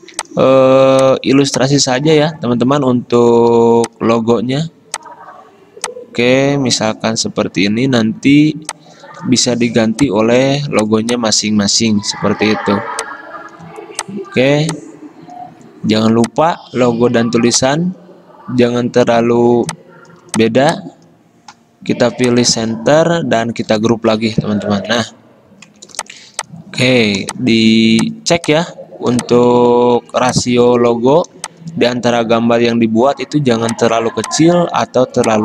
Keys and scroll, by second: 3.7 v, 12.3 ctrl+g, 23.7 ctrl+g.